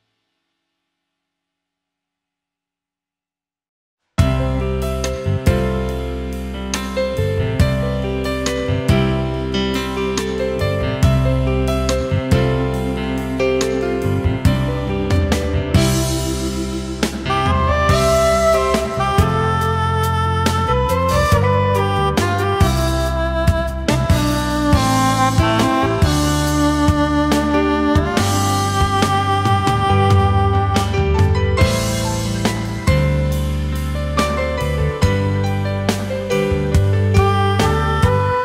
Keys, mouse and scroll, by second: 6.9 alt+scroll up 1, 7.2 space, 10.0-10.4 alt+scroll up 1, 11.8 ctrl+z.